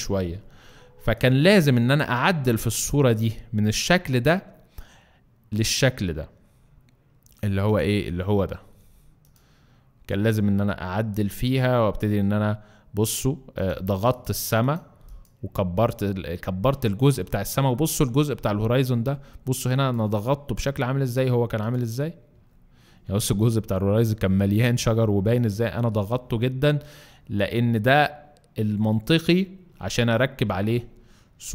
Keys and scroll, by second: 19.5 alt+space.